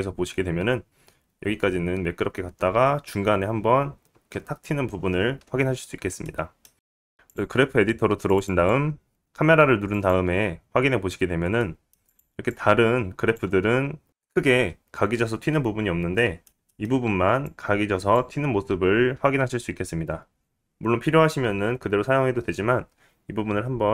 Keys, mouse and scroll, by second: 0.8 space, 5.4 space, 6.7-7.1 scroll up 2, 6.8 click, 6.8 middle click, 6.8 right click, 7.1 scroll down 5, 7.7-8.7 right drag, 8.7 click, 11.3-13.3 right drag, 12.3 scroll up 2, 12.8 middle click, 13.3 click, 13.4 right click, 13.7 click, 14.6-16.5 scroll up 5, 15.0 middle click, 15.3-17.5 drag, 15.3-17.5 right drag, 15.8-17.0 middle drag, 16.6-17.0 scroll down 1, 17.9 middle click, 18.7 click, 21.8-23.9 drag, 21.8-23.9 right drag.